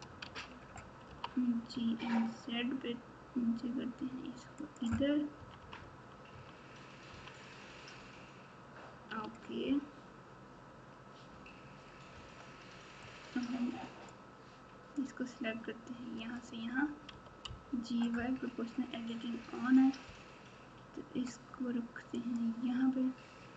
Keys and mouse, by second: 0.2 alt+z, 1.0 g, 5.3 KP_6, 5.6 KP_6, 6.3 KP_6, 7.1 KP_3, 9.2 alt+z, 13.0-14.1 drag, 15.0-16.3 drag, 17.1 g.